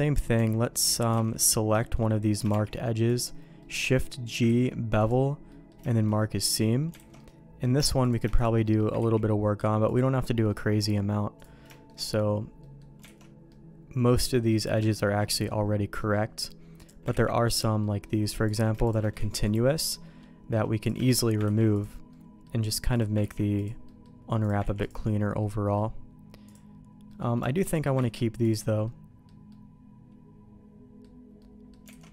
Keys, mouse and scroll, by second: 0.3 Tab, 0.8 middle click, 1.2 alt+a, 1.4 click, 1.8 shift+middle click, 2.5 shift+g, 3.6 middle click, 4.4 ctrl+e, 5.4 middle click, 5.8 shift+middle click, 6.1 middle click, 6.9 alt+a, 7.1 middle click, 8.0 click, 8.3 shift+click, 8.6 middle click, 8.9 ctrl+e, 10.4 middle click, 11.3 click, 11.7 middle click, 12.6 middle click, 13.0 alt+a, 13.4-14.5 middle drag, 15.3 middle click, 16.0 middle click, 16.7 click, 17.1 ctrl+e, 17.8 middle click, 18.4 click, 18.8 click, 19.4 ctrl+e, 19.9 middle click, 20.8 click, 21.0 click, 21.5 ctrl+e, 22.0 middle click, 22.9 click, 23.4 ctrl+e, 23.8 middle click, 24.4 click, 24.7 ctrl+e, 25.4 middle click, 27.0 middle click, 27.6 shift+click, 28.2 ctrl+e, 28.8 middle click, 29.4-31.0 middle drag, 31.3 middle click, 31.9 alt+a.